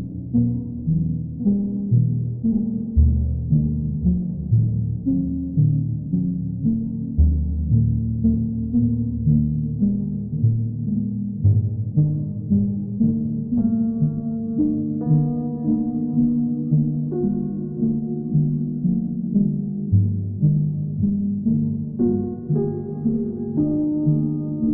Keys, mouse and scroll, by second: 0.4 alt+click, 0.8 alt+click, 2.9 ctrl+click, 3.3 ctrl+click, 3.9 ctrl+click, 4.0 w, 6.7 alt+click, 10.0 alt+click, 10.4 ctrl+click, 11.3 alt+click, 13.0 click, 14.2 click, 14.5 shift+click, 16.2 alt+click, 17.0 click, 18.4 click, 18.8 click, 19.1 click, 19.5 shift+click, 20.0 shift+click, 20.3 alt+click, 20.5 alt+click, 20.8 alt+click, 21.2 shift+click, 23.8 alt+click, 24.1 click, 24.5 click.